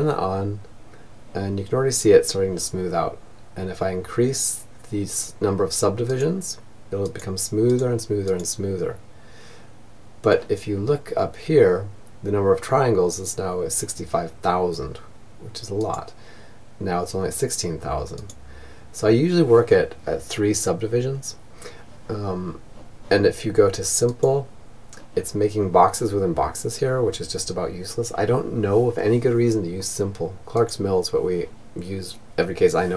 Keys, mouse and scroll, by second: 4.5-8.7 drag, 14.3-20.0 drag, 22.4-24.1 drag, 28.9-30.6 drag.